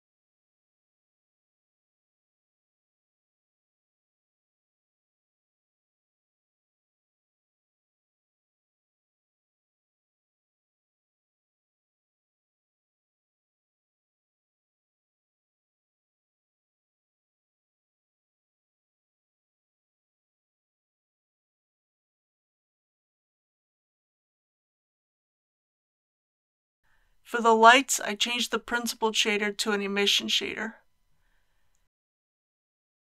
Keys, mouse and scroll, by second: 0.2 click, 7.6-9.2 typing, 9.7 Return, 15.4 alt+a, 16.4-18.3 drag, 19.4 scroll up 1, 20.2-20.9 scroll up 1, 20.9 click, 21.6 right click, 23.2 click, 23.6 right click, 24.8-33.1 drag.